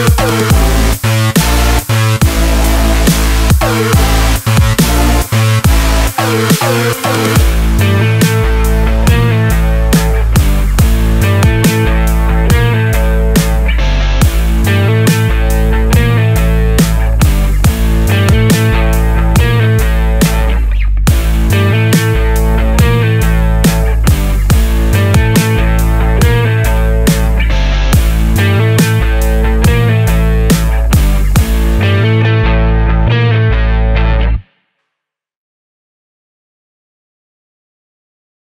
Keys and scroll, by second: 8.2 ctrl+z, 8.8 ctrl+z, 9.7 ctrl+z, 23.5 ctrl+z, 31.3 ctrl+z, 32.7 ctrl+d.